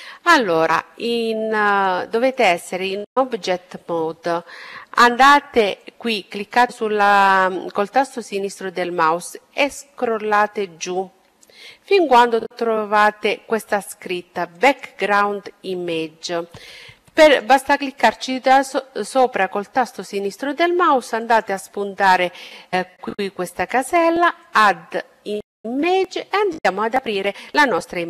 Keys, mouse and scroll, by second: 1.1-3.3 drag, 5.2-6.9 drag, 14.0-16.0 drag, 16.6-19.2 drag, 20.6-22.7 drag, 23.9-26.0 drag, 27.8 click.